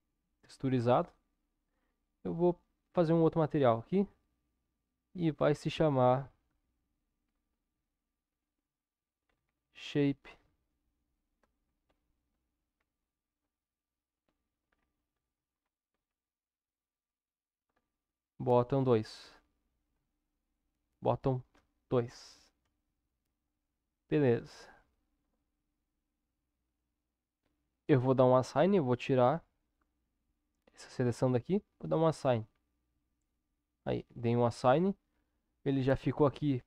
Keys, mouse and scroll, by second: 6.9-36.6 shift+drag.